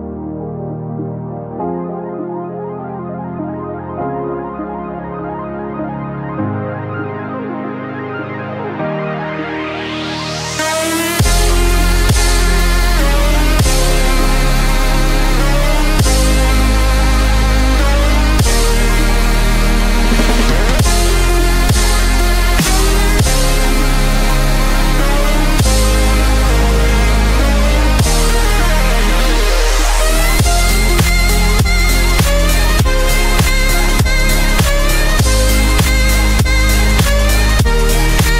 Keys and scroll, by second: 28.0 ctrl+t.